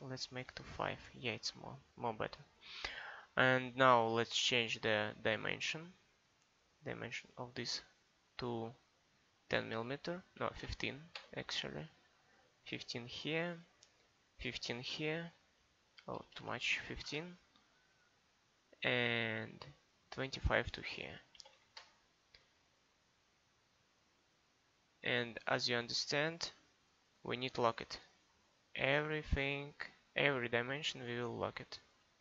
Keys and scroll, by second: 10.4 1, 10.6 5, 11.2 Return, 14.9-16.8 typing, 17.1 Return, 21.4 2, 21.6 5, 21.8 Return.